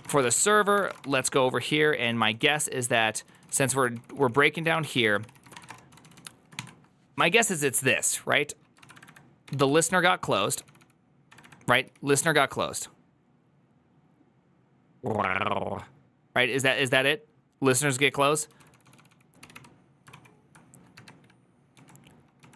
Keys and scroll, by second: 0.0-6.9 typing, 8.4-12.4 typing, 13.5 typing, 17.2 typing, 18.6-22.3 typing.